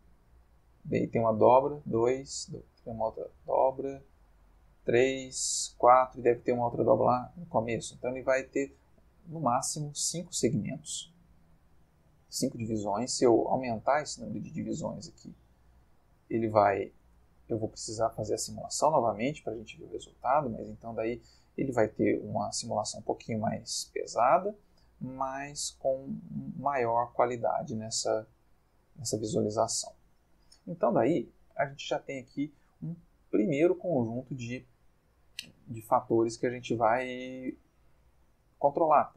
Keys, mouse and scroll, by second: 2.7-3.9 middle drag, 4.9-5.7 middle drag, 7.2-8.0 ctrl+middle drag, 8.4 middle click, 11.0-13.0 middle drag, 14.1 click, 15.6 click, 17.0 space, 17.5 Escape, 18.5 click, 19.5 space, 29.9 Escape, 34.8 middle click, 36.9-37.5 ctrl+shift+middle drag, 37.6 ctrl+shift+middle click.